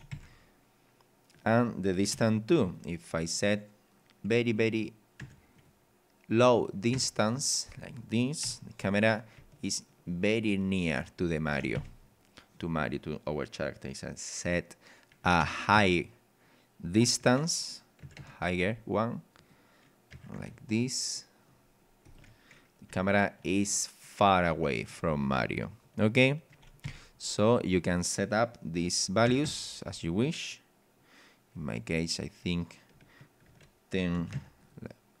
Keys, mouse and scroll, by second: 0.1 Escape, 1.3 click, 2.1 KP_5, 2.7 click, 3.3 click, 4.5 click, 5.2 KP_1, 5.6 click, 6.5 click, 7.0 KP_2, 7.2 click, 7.8 click, 8.4 p, 9.4 w, 11.0 d, 11.8 Escape, 12.5 click, 15.4 KP_2, 15.8 KP_0, 17.1 BackSpace, 18.0 KP_5, 18.0 KP_0, 18.6 click, 19.4 click, 20.1 KP_6, 20.5 KP_0, 20.8 click, 21.7 scroll up 1, 22.0 click, 22.2 p, 22.9 w, 23.5 d, 26.8 Escape, 27.7 click, 29.3 KP_2, 29.4 KP_5, 31.6 click, 33.0 BackSpace, 34.3 KP_1, 34.6 click, 34.6 KP_0.